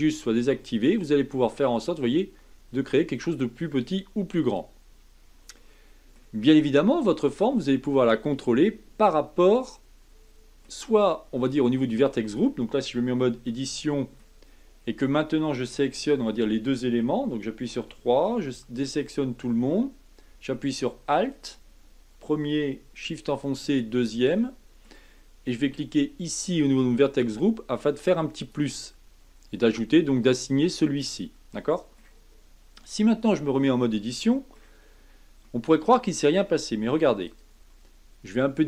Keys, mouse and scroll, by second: 0.6-3.7 drag, 5.5-6.4 middle drag, 6.4 scroll down 3, 6.9-13.3 middle drag, 13.3 Tab, 13.8 middle click, 14.4-17.7 scroll up 5, 17.7 3, 18.4 a, 21.3 alt+click, 23.6 alt+shift+click, 24.4-26.6 middle drag, 26.6 click, 28.4-31.5 drag, 31.5-33.4 middle drag, 33.4 Tab, 33.9-34.8 middle drag, 34.8-35.4 scroll down 2, 35.4-37.2 middle drag, 37.2 click.